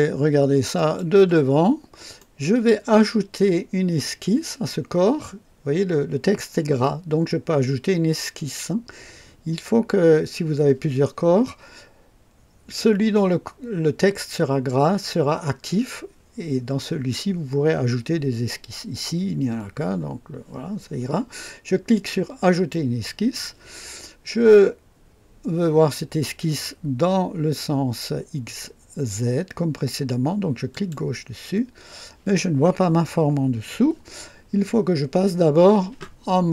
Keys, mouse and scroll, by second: 0.7 click, 1.6 scroll up 1, 2.2 right click, 22.5 click, 30.7 click.